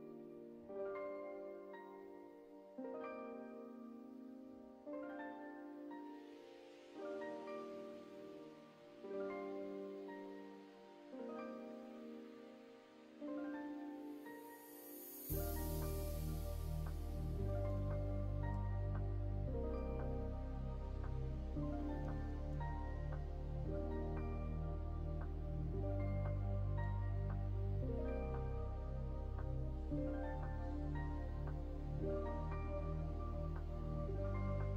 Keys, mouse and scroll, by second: 1.0 click, 1.4-4.4 middle drag, 5.0-7.2 middle drag, 8.2 middle click, 8.9-11.3 middle drag, 13.7 click, 14.3 middle click, 15.8-23.1 drag, 21.0 Left, 23.6-25.3 middle drag, 25.9 middle click, 30.3 right click, 31.2 middle click, 33.2-34.7 drag.